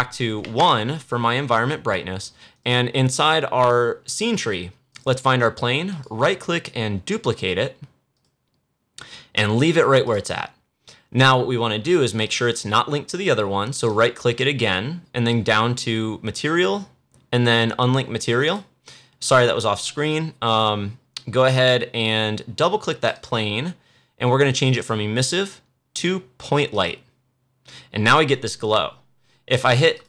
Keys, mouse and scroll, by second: 2.4 click, 4.8 click, 5.8 right click, 8.0 click, 13.8 right click, 18.3 click, 22.7 click, 29.9 click.